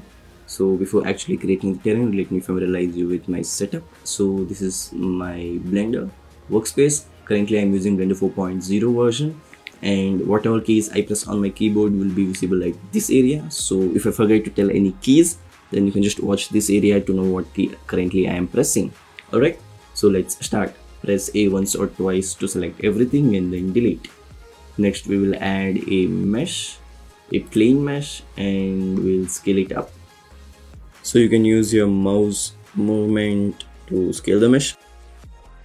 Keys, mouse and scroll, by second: 20.9 a, 21.2 a, 23.5 Delete, 24.9 shift+a, 29.9 s, 31.8 s.